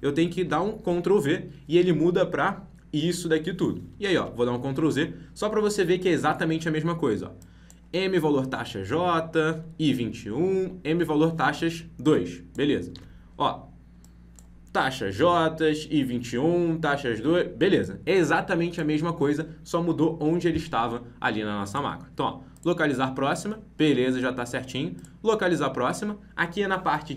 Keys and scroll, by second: 0.4 ctrl+v, 4.1 ctrl+z, 12.9 ctrl+v.